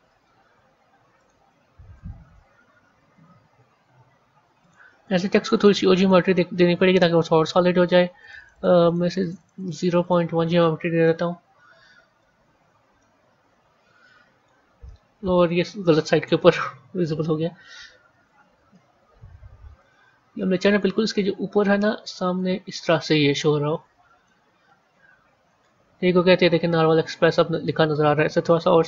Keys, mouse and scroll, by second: 1.1 click, 2.1 g, 5.4 click, 6.1 click, 8.1-10.9 drag, 10.9-12.3 middle drag, 12.3-12.9 scroll up 2, 12.9-16.3 middle drag, 16.3 KP_1, 18.0 g, 23.0-24.3 middle drag, 24.3 scroll down 1, 25.4 a, 27.1 click, 28.5 s.